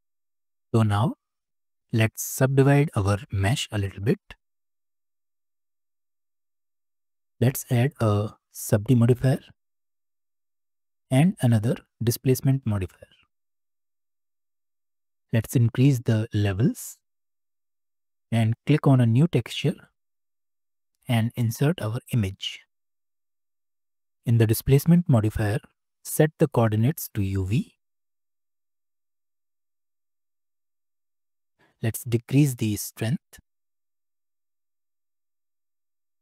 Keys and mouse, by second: 1.7 click, 2.0 Tab, 4.2 ctrl+r, 7.4-10.6 drag, 11.5 click, 16.5 click, 16.9 click, 19.7 click, 20.9-23.7 drag, 27.5-28.5 drag, 29.7-31.0 middle drag, 32.7-36.2 shift+middle drag.